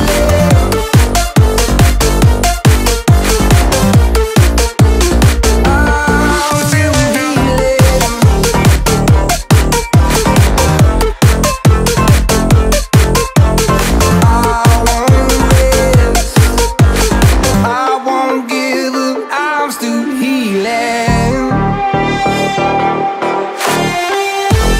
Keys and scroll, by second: 13.3 ctrl+-, 13.5 ctrl+-, 13.6 ctrl+-, 13.8 ctrl+-, 16.2 ctrl+-.